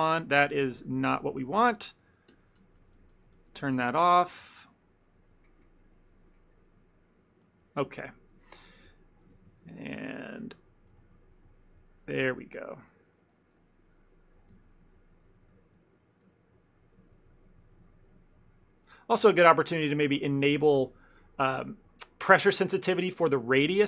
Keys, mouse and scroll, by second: 0.0 ctrl+z, 0.9-2.2 ctrl+z, 2.5 ctrl+z, 3.1 ctrl+z, 3.5 ctrl+z, 4.5 ctrl+z, 6.4 middle click, 7.5 click, 8.0 ctrl+middle click, 8.5 shift+middle click, 8.8 f, 9.4 f, 9.6 shift+middle click, 9.8 ctrl+middle click, 10.2 click, 10.5 click, 11.0 click, 11.0 f, 11.4 click, 11.7 click, 12.3 click, 12.6 click, 12.8 click, 13.2 click, 13.7 click, 14.0 click, 14.5 f, 14.9 click, 15.1 click, 16.3 f, 17.0 click, 17.2-18.9 click, 20.9 click.